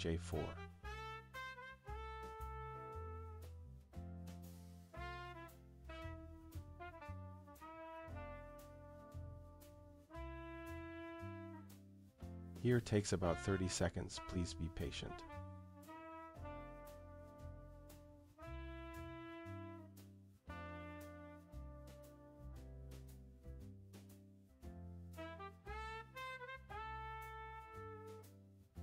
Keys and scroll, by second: 2.6 Return.